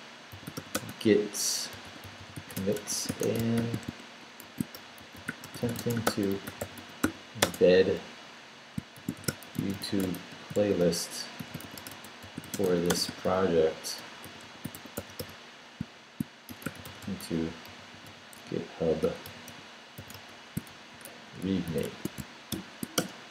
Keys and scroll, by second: 0.1-7.5 typing, 8.7-22.5 typing, 23.0 shift+Return.